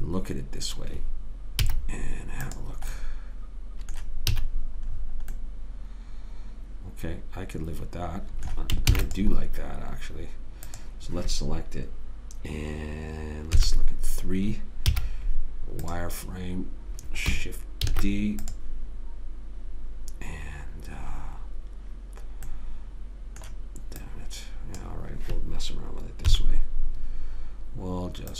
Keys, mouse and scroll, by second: 2.0 z, 3.4 middle click, 4.7 a, 8.1-9.3 middle drag, 9.3 ctrl+s, 13.9 KP_3, 15.3 z, 16.7 middle click, 18.2 shift+d, 22.8-24.4 middle drag, 24.4 click, 26.7 KP_3.